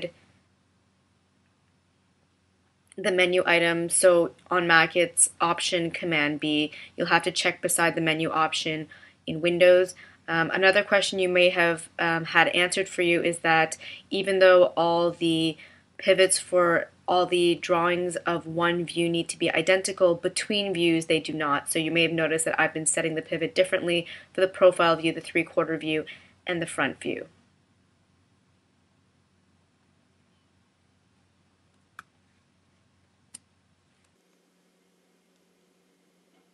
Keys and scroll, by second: 32.1 space.